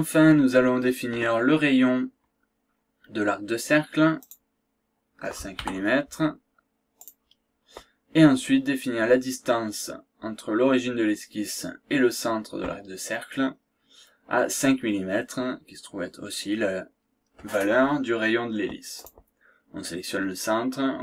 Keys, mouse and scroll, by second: 4.3 click, 5.6 KP_5, 7.0 click, 19.0 click.